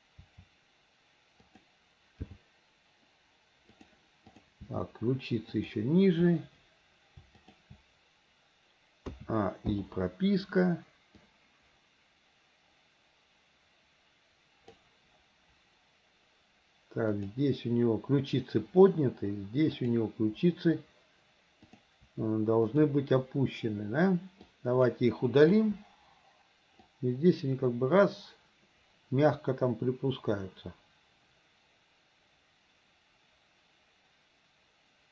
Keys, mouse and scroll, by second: 0.2 r, 2.2 g, 4.3 click, 4.7 g, 7.4 click, 9.2 a, 9.8 i, 11.3-14.9 drag, 17.2 click, 19.8 click, 21.7 click, 22.7 shift+click, 24.5 click, 25.6 Delete, 26.9-35.1 drag.